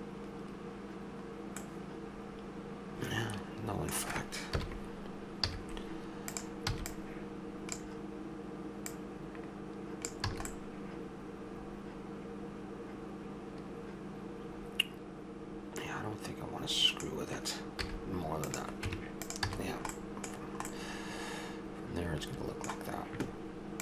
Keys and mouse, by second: 1.6-3.1 middle drag, 4.5 KP_1, 5.4 z, 6.7 b, 8.9-10.1 drag, 10.3 a, 10.7-11.9 middle drag, 17.8 z, 18.9 Tab, 19.5 a.